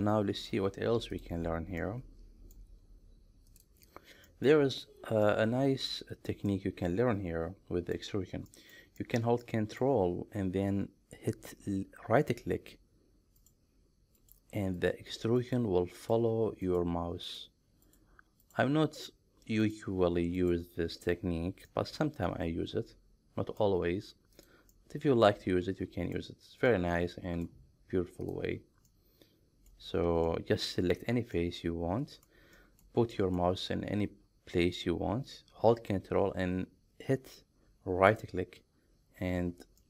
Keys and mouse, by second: 1.2 click, 1.8 middle click, 4.3 middle click, 5.3 middle click, 6.5-8.0 middle drag, 8.5 middle click, 9.0 shift+middle click, 9.5 middle click, 13.4 ctrl+right click, 14.3-14.9 ctrl+right drag, 15.5 ctrl+right click, 17.3 ctrl+right click, 17.9 ctrl+right click, 18.4 ctrl+right click, 19.7 ctrl+right click, 20.4 ctrl+right click, 21.7-23.6 middle drag, 24.4 click, 24.8-26.2 middle drag, 26.7 middle click, 28.3 click, 29.0 middle click, 30.3 middle click, 31.4 middle click, 32.6 shift+middle click, 33.2 middle click, 38.1 ctrl+right click.